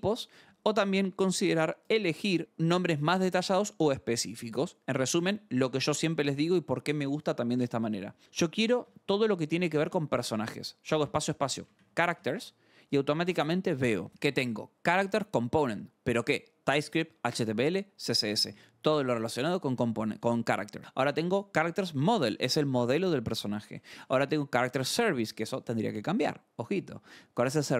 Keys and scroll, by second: 8.2-14.3 typing, 8.8 Return, 16.8 ctrl+n, 21.1 ctrl+n, 23.7 ctrl+n.